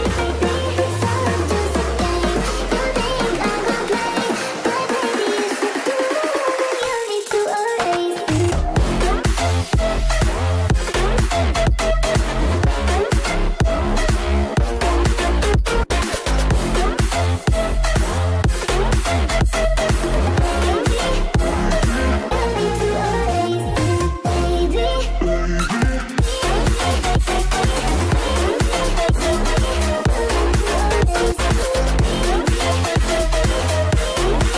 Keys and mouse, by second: 0.4 click, 3.1 g, 9.5 g, 15.6 KP_0, 15.9 KP_0, 25.2 r, 28.6 ctrl+Tab, 28.8 click, 29.2 g, 33.3 ctrl+Tab, 33.8 ctrl+Tab, 34.0 click.